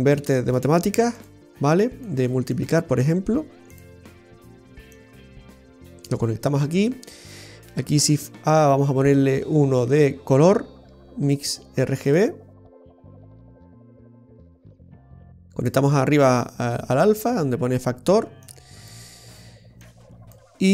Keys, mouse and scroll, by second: 1.9 click, 2.6 click, 5.0 click, 13.2 click, 14.9 click, 16.4 click, 18.5 click, 19.9 click.